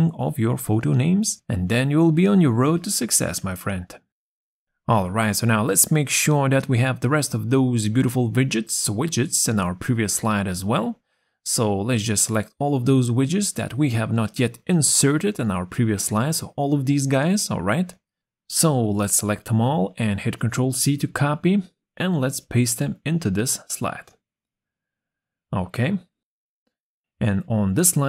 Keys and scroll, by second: 13.8 ctrl+z, 16.2 ctrl+z, 20.6 ctrl+z, 22.7 ctrl+c, 26.5 ctrl+v.